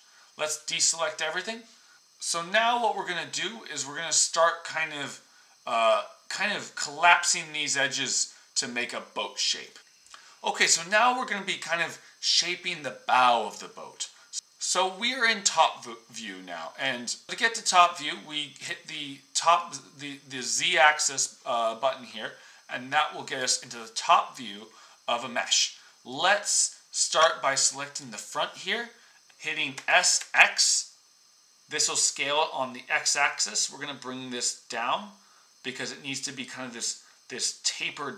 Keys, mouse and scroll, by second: 9.8-14.3 middle drag, 19.7-23.2 middle drag, 23.3-26.2 middle drag, 29.7 s.